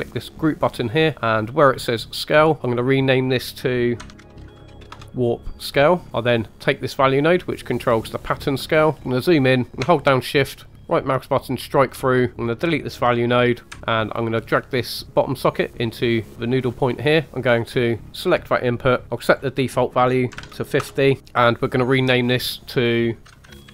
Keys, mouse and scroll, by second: 0.3 click, 2.2 click, 2.4 click, 6.1 right click, 6.1-6.8 scroll down 1, 6.8 click, 8.8 right click, 8.9 click, 9.0 shift+middle click, 9.0-9.4 scroll up 3, 10.3 shift+click, 10.3 shift+right click, 12.3 click, 13.7 Delete, 15.0 click, 17.3 click, 18.1 click, 19.2-20.8 drag, 21.5 click, 21.6 click, 23.3 click, 23.5 t.